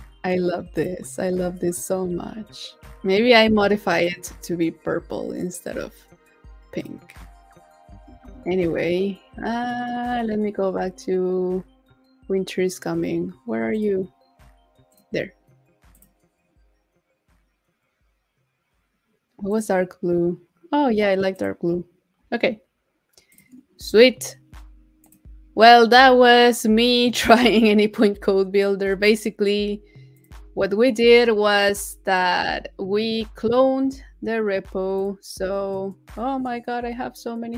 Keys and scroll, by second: 8.2 super+a.